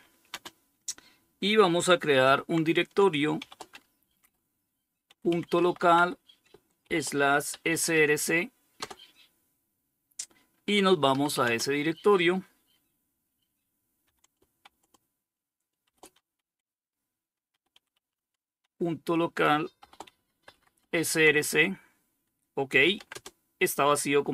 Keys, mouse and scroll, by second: 1.4 typing, 2.6-8.0 typing, 10.3-11.0 typing, 13.0-13.8 typing, 15.1-20.5 typing, 21.9-22.7 typing.